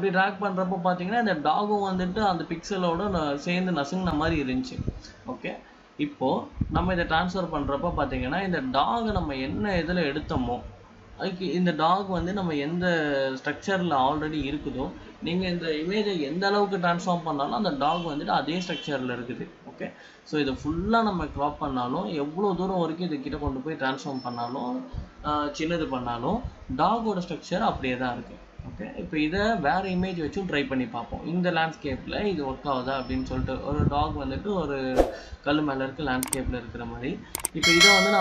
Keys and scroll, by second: 30.1 Return.